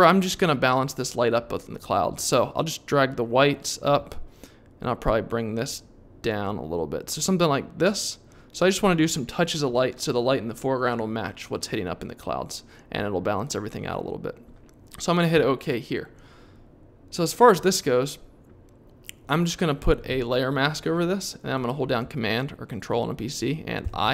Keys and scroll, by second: 23.8 super+i.